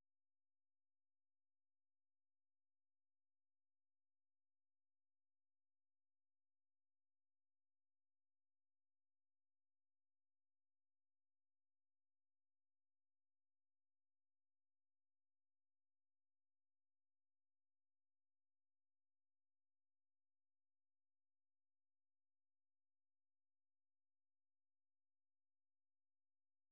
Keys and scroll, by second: 0.9-4.7 typing, 4.7 ctrl+[, 6.6-7.8 typing, 8.1 Return, 9.6-10.9 typing, 13.6-14.8 typing, 16.1-26.7 typing.